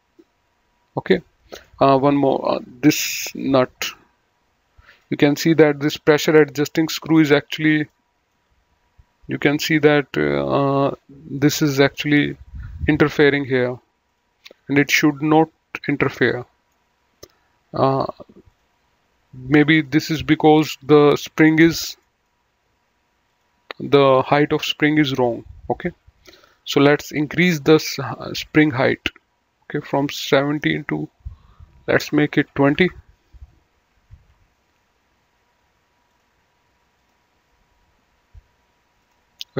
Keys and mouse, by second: 1.2 middle click, 2.1 click, 3.6 click, 4.9 middle click, 7.9 middle click, 9.5 middle click, 10.9 middle click, 14.1 click, 15.6 middle click, 18.5 click, 19.6 click, 22.0 middle click, 23.3 click, 26.3 click, 28.3 click, 30.4 click, 32.4 KP_2, 32.6 KP_0, 32.8 KP_Enter, 34.2 ctrl+q, 36.1 click, 39.0 click.